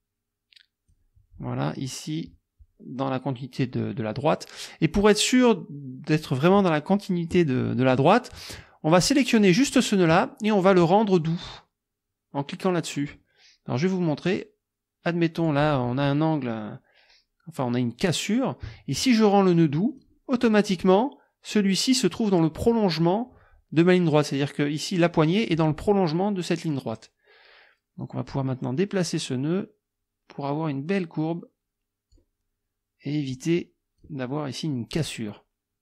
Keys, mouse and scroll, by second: 8.7 click, 14.3-15.7 drag, 19.9 click, 28.0 click, 28.9-32.3 drag, 33.3 click.